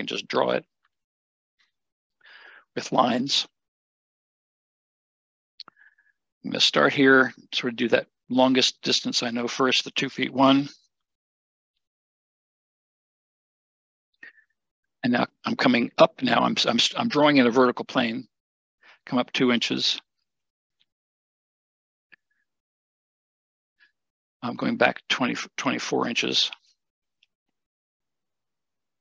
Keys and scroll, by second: 10.2-11.1 typing, 11.1 Return, 19.2 2, 20.4 Return, 25.6 2, 28.6 Return.